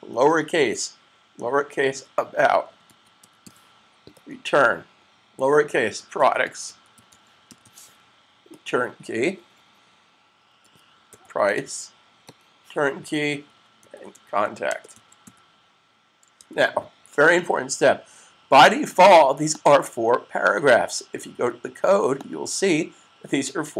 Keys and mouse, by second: 1.7-3.8 typing, 5.5-6.2 typing, 10.9-11.9 typing, 13.2-15.5 typing, 16.4 super+s, 18.9 typing, 19.2 click, 22.0 click.